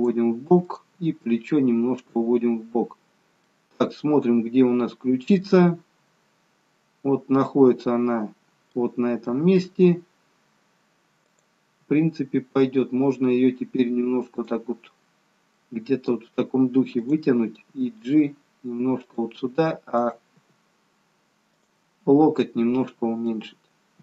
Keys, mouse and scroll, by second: 0.7 click, 0.9 g, 3.3 middle click, 9.2 middle click, 11.2 click, 11.7 g, 15.6 middle click, 17.1 click, 17.7 g, 20.0 click, 20.5 g, 22.0-23.2 scroll down 3, 23.2 middle click.